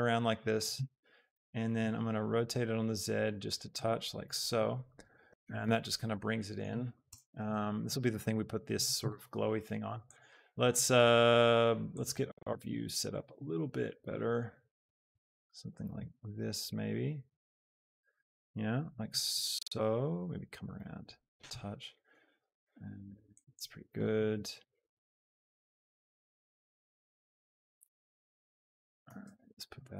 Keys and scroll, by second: 1.3 r, 2.0 z, 7.2 KP_0, 28.9 shift+g, 29.3 x.